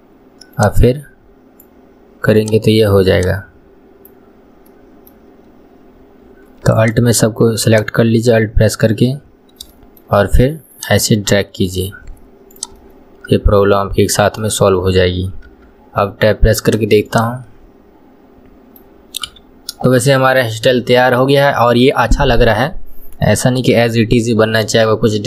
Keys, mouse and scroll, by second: 2.4 click, 3.2 click, 4.8-6.8 middle drag, 6.8 alt+click, 7.7 alt+click, 9.4 scroll down 1, 9.8-10.8 shift+middle drag, 10.8 click, 12.6 click, 12.8-15.6 middle drag, 15.6 Tab, 16.7 click, 17.1 click, 17.5-19.3 middle drag, 19.3 KP_1, 19.6-20.0 scroll down 2, 20.0 shift+middle click, 20.5-20.8 scroll down 1, 20.8-25.2 shift+middle drag.